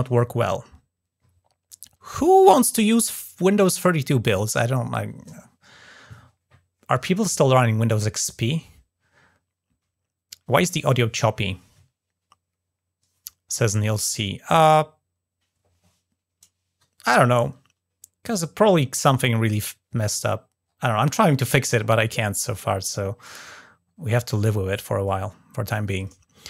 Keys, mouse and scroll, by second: 0.4 scroll down 1, 2.1-3.1 drag, 19.5 scroll down 1, 20.4-20.7 scroll down 1, 21.5 scroll up 1, 22.2 scroll down 2, 23.0-23.3 scroll up 2.